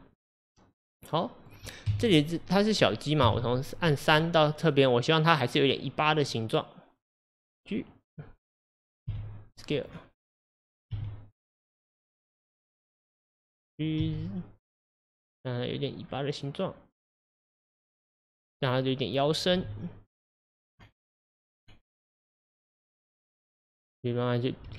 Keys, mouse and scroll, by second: 1.9 KP_1, 3.3 KP_3, 4.2 click, 6.3 click, 8.1 click, 8.7 click, 9.1 g, 14.0 g, 18.3 click, 19.6 g.